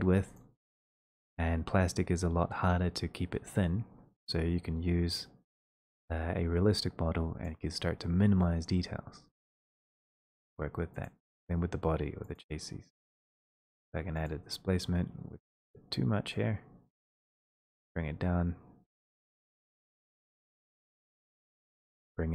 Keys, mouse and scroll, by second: 4.5 click, 4.5 scroll, 7.4 click, 15.3 click, 15.3 scroll, 19.1 middle click.